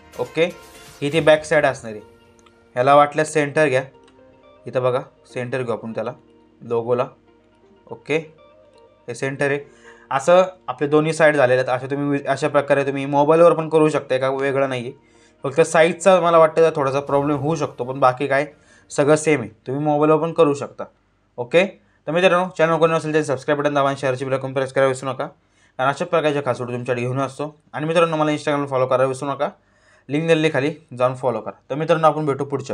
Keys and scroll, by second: 2.3 ctrl+t.